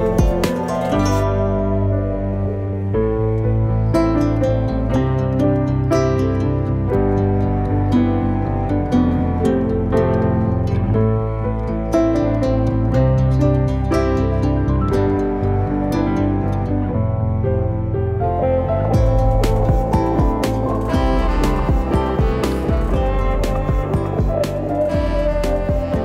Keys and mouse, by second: 1.4 click, 1.9 alt+right click, 3.6 KP_3, 4.4 shift+middle click, 4.8 Tab, 5.1-5.6 middle drag, 5.8-6.1 middle drag, 6.2 Tab, 6.8 right click, 7.3 shift+right click, 8.2 shift+right click, 8.7 shift+right click, 8.9 KP_3, 9.8 g, 12.4 g, 13.7 Tab, 14.2 shift+middle drag, 14.6 Tab, 14.9 shift+middle click, 15.6 alt+z, 15.9 right click, 16.3 shift+middle click, 16.9 c, 17.8 g, 20.1 r, 23.5 right click, 23.7 g, 24.8 right click, 25.0 g.